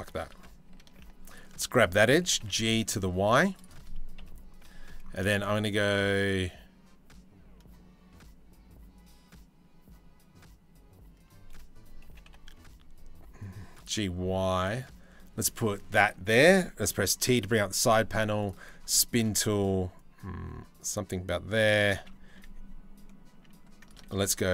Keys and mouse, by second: 0.3 ctrl+z, 1.8 g, 3.8 KP_3, 11.7 g, 16.5 t, 18.5 shift+middle click, 19.6-21.4 drag, 22.0 e, 23.7 ctrl+z.